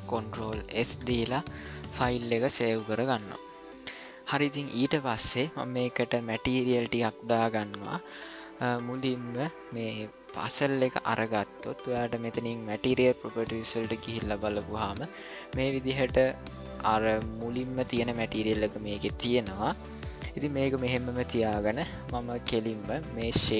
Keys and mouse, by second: 0.7 ctrl+s, 10.4 click, 12.7 click.